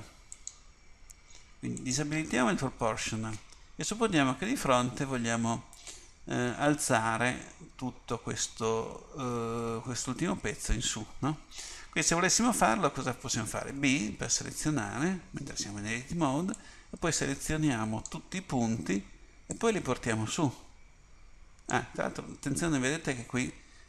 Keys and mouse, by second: 0.4-4.0 drag, 4.0 KP_1, 13.8 b, 19.7-21.2 drag.